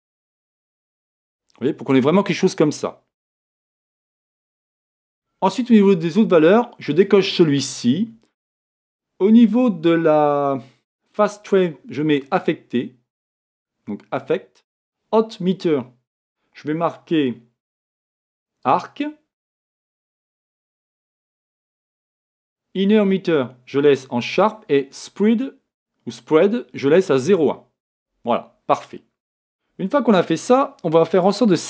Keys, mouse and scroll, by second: 28.1-31.6 drag.